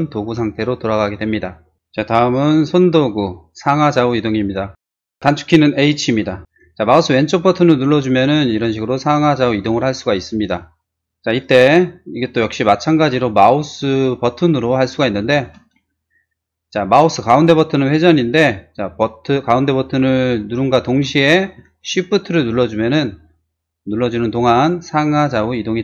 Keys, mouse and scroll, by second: 3.5 click, 5.7 h, 6.4 click, 6.9-10.8 drag, 15.4 space, 17.5 middle click, 17.9 middle click, 19.1 middle click, 19.9-25.8 middle drag.